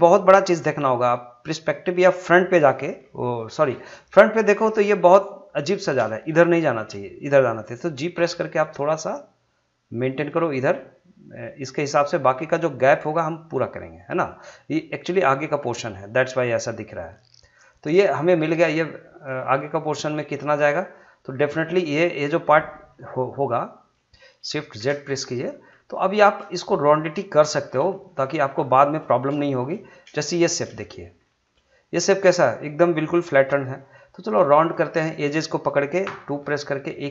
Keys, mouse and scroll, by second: 3.9-4.5 scroll up 1, 5.1 shift+middle click, 6.7 shift+middle click, 8.1 g, 11.6 click, 17.3-21.7 middle drag, 21.7 scroll up 1, 22.0-24.7 middle drag, 24.7 shift+z, 25.1 middle click, 25.9 shift+middle click, 28.7 shift+middle click, 29.4 shift+middle click, 30.2 shift+middle click, 30.5 scroll up 2, 30.8 shift+middle click, 34.6 click, 34.7 click, 36.0 2, 36.9 click.